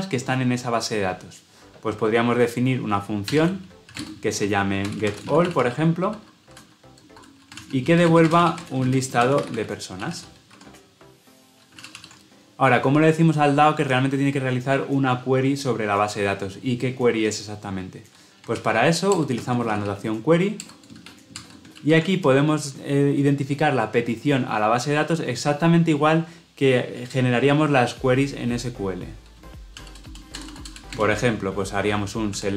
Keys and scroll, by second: 10.4 Escape, 11.9 ctrl+alt+o, 20.6 Return, 21.7 ctrl+p.